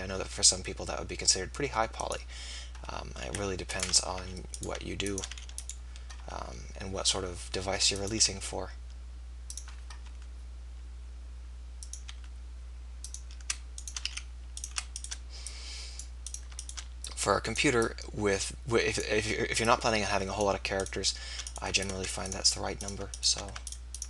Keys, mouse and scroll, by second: 3.7 click, 4.1 f, 5.3 f, 6.1 e, 8.5 e, 9.5-11.5 drag, 10.1 e, 11.9-13.7 drag, 12.3 e, 14.1 f.